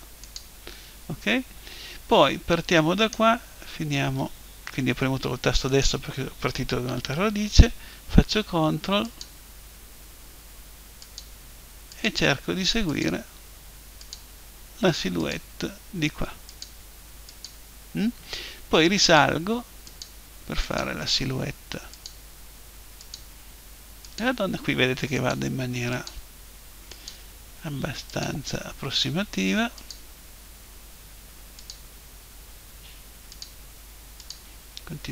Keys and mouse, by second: 3.0-4.8 right drag, 5.7-7.7 right drag, 9.0 click, 11.0-31.4 drag.